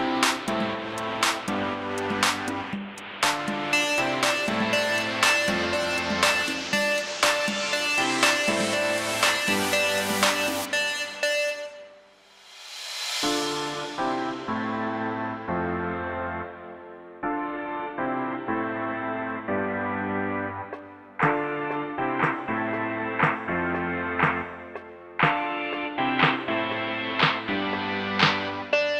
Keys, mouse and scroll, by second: 0.0 click, 0.7 middle click, 0.9 scroll, 1.0 click, 1.4 scroll, 2.1 click, 2.3 click, 2.8-3.1 typing, 3.8 click, 4.4 click, 4.5 click, 4.6-5.3 typing, 5.8 middle click, 5.8-6.2 scroll up 3, 6.2-6.8 shift+middle click, 6.4 shift+middle click, 6.5 middle click, 6.6 middle click, 6.7 middle click, 6.8 shift+middle click, 6.9 click, 7.5 click, 8.9 click, 9.9 typing, 10.9 click, 11.3 click, 12.5 click, 13.0 click, 13.5 click, 14.0 0, 14.1 Return, 14.8 click, 15.6 click, 16.9 click, 17.3-17.9 typing, 18.9 click, 19.1 click, 20.7 click, 21.4 click, 22.3 click, 24.2-24.9 scroll down 23, 24.9 click, 25.0 click, 25.3 scroll down 1, 25.5 middle click, 25.6 scroll, 25.9 scroll down 1, 26.0 shift+middle click, 26.5 middle click, 26.5-27.0 scroll up 1, 27.0 click, 27.4 scroll up 1, 28.0 click, 28.0 ctrl+click, 28.4 click, 28.7 click.